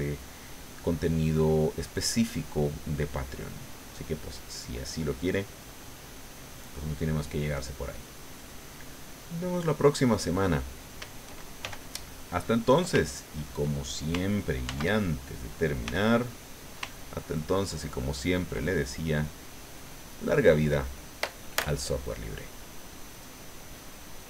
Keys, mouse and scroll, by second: 0.4 click, 1.7 click, 2.2 click, 3.2 middle click, 4.4-6.0 drag, 7.1-8.9 drag, 9.0 middle click, 11.6 shift+f, 12.4 click, 12.9 ctrl+click, 14.6 ctrl+z, 15.8 f, 16.3 click, 16.9-18.6 ctrl+drag, 18.7-20.0 ctrl+drag, 20.2 click, 23.1 click, 24.2 click.